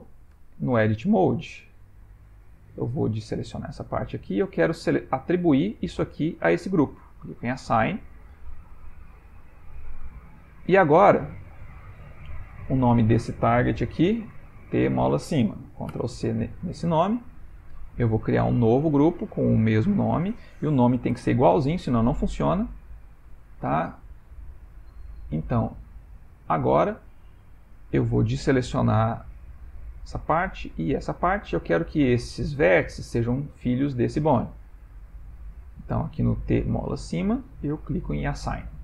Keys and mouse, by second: 0.4 Tab, 2.7 c, 7.4 click, 9.8 a, 12.0 Tab, 12.6 click, 13.8 F2, 17.7 click, 19.0 click, 19.7 click, 19.8 click, 25.2 click, 26.2 click, 26.7 Tab, 28.6 click, 29.3 click, 30.0 click, 30.8 click, 35.7 click, 37.6 click, 38.4 Tab.